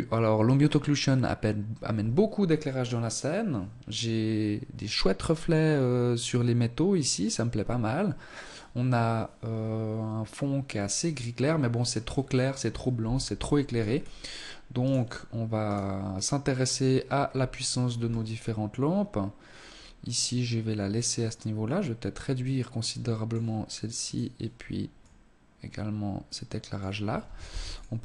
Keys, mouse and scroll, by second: 12.1 Escape, 12.7-13.8 scroll down 4, 13.8 right click, 14.6 right click, 16.2-16.9 scroll down 1, 16.9 scroll down 2, 19.1 right click, 20.2 click, 23.0 right click, 23.9 click, 26.5 ctrl+s, 27.0 scroll up 3.